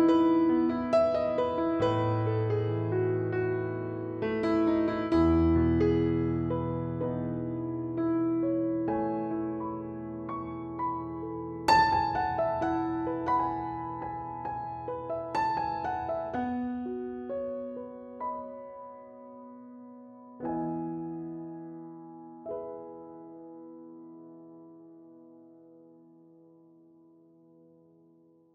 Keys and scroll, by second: 8.2 0, 8.5 Return, 15.8 ctrl+c, 16.4 ctrl+v.